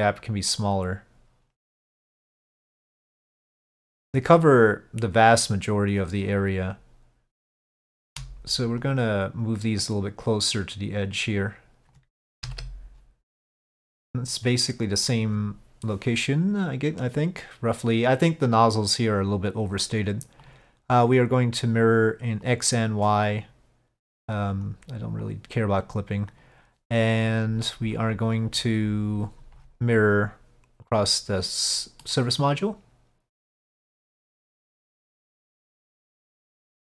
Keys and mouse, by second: 7.7 shift+middle click, 8.9-11.1 drag, 12.5 KP_5, 20.5-21.6 drag, 22.5 click, 23.1 click, 23.4-24.7 drag, 25.3 click, 25.9 click, 26.5-31.0 drag, 32.1-34.2 middle drag, 36.5 middle click.